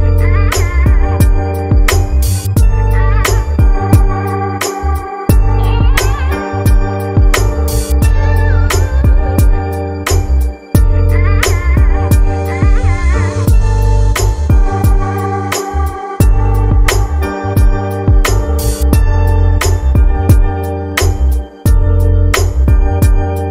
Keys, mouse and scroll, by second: 3.0-5.0 drag, 6.7 click, 11.9-12.4 scroll down 2, 12.7-14.5 drag, 14.5-15.7 scroll down 7, 15.7-16.1 drag, 16.1-17.2 scroll down 4, 17.2-18.8 drag, 18.8-19.4 scroll down 4, 19.6-20.8 scroll down 5, 22.2-23.5 drag.